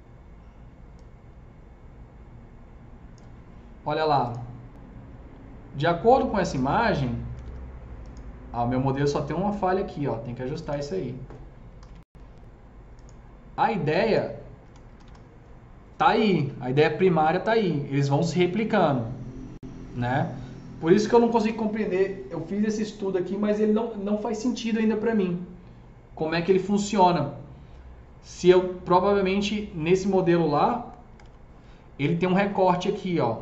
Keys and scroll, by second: 6.9 F3, 7.1 F3, 7.3 F4, 11.6-12.3 typing, 13.7-15.0 typing, 14.6 F3, 30.7 F3, 31.1 F3, 31.1 F4.